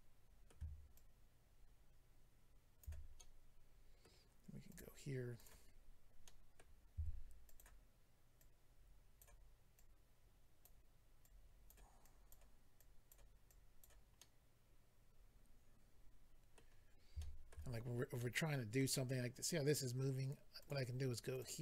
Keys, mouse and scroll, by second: 0.9 ctrl+click, 3.1 middle click, 4.7 click, 4.8 click, 5.4 click, 6.2 middle click, 6.9 f, 7.5 click, 7.6 click, 8.4 click, 9.7 click, 11.2 click, 12.8 click, 13.5 click, 14.1 middle click, 17.1 shift+middle click, 17.7-18.0 scroll up 2, 18.2 middle click, 20.6 click, 20.7 click, 21.3 click, 21.4 click.